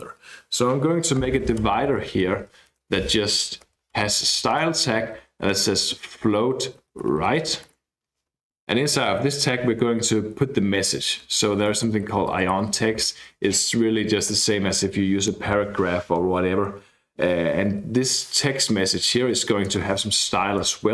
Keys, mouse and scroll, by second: 1.1-8.4 typing, 6.2 Return, 11.0-13.4 typing, 13.9 Left, 14.2 Right, 18.7 Left, 19.6-20.6 typing, 20.6 Return.